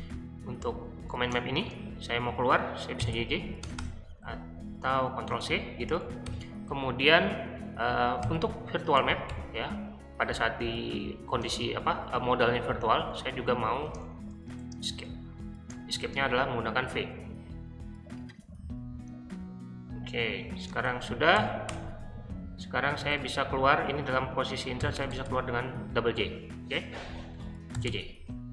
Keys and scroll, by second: 0.0-3.7 typing, 5.2 ctrl+c, 6.2 o, 8.2-9.8 typing, 11.3 space, 13.4-15.9 typing, 20.5 Escape, 20.8-23.5 typing, 24.6-25.3 typing, 27.3-28.2 typing.